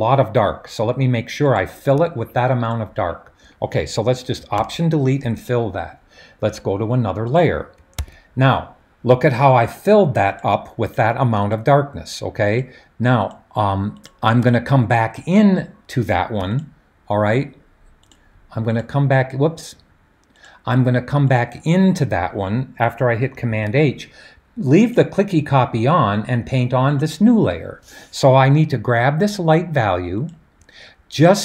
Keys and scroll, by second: 4.6 alt+BackSpace, 7.9 super+d, 23.5 super+h.